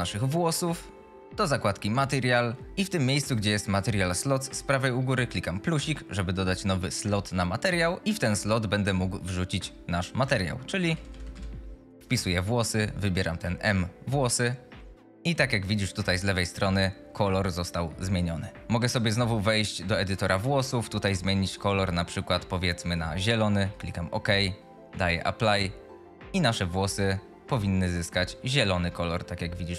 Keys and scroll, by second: 16.0 F22.